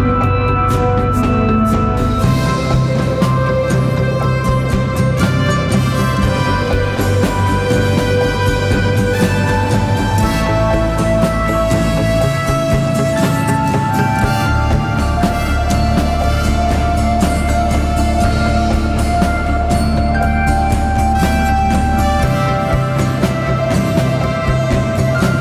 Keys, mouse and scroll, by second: 13.3 double click, 18.0-20.0 typing, 20.5 double click, 24.9-25.3 typing.